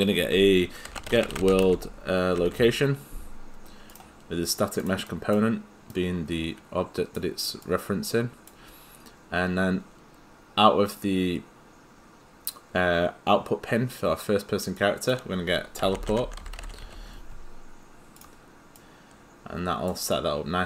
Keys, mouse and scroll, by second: 0.6-3.0 typing, 3.9 click, 15.4 click, 15.6-17.3 typing, 18.2 click.